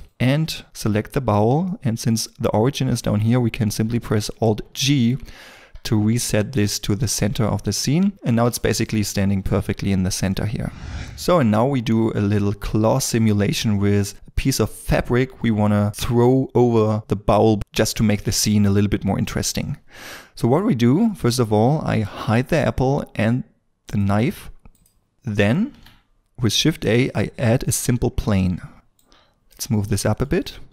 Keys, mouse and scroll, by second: 1.7 middle click, 4.6 alt+g, 5.5 scroll up 1, 6.9 shift+middle click, 7.5 scroll up 1, 8.3-8.6 scroll down 1, 8.6 shift+middle click, 25.1 shift+middle click, 27.6 shift+a, 28.1 scroll down 1, 29.7 shift+middle click.